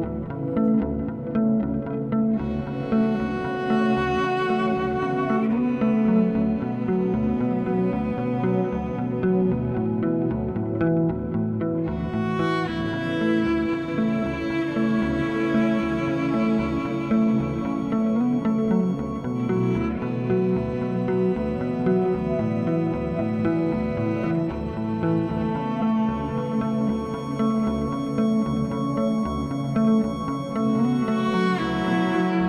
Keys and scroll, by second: 2.8 s, 9.8 s, 10.8 alt+e, 11.4-13.0 typing, 17.8 2, 21.2 s, 30.3 alt+e, 32.2 2.